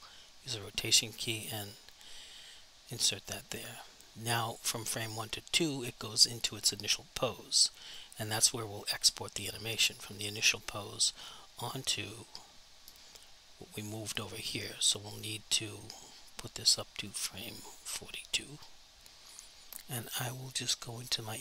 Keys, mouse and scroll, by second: 1.6 click, 5.1 click, 10.2 click, 14.5 click, 17.0 click, 21.0 click.